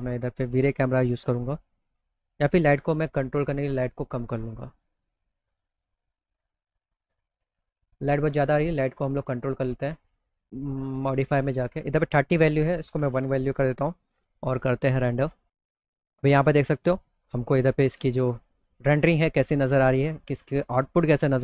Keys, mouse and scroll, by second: 5.1 click, 6.6 click, 11.5 click, 14.7 click, 15.9 middle click, 17.6 middle click, 20.8 middle click.